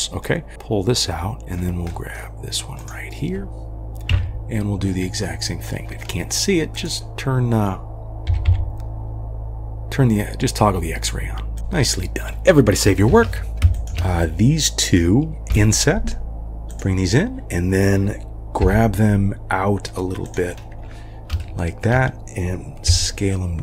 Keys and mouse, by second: 0.2 click, 1.4 middle drag, 2.0 middle click, 4.1 KP_3, 5.8 middle click, 6.7 click, 8.3 g, 13.1 ctrl+s, 13.5 3, 13.7 shift+click, 15.5 i, 20.5 g, 21.4 shift+middle click, 22.9 s.